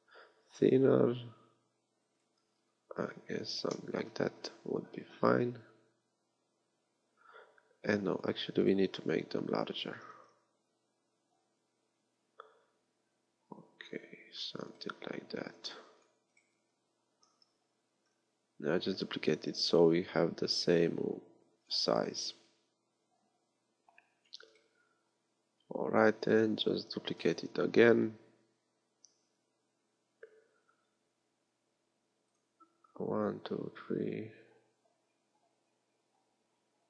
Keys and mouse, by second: 9.9 s, 15.6 x, 17.3 shift+d, 22.0-24.3 drag, 25.1-26.9 drag, 26.9 shift+d.